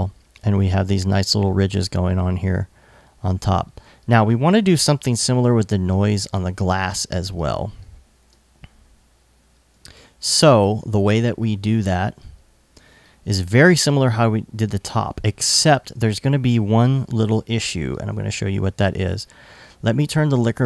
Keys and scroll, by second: 4.7 alt+i, 7.3 alt+i, 8.1 i, 12.4 i, 15.1 i.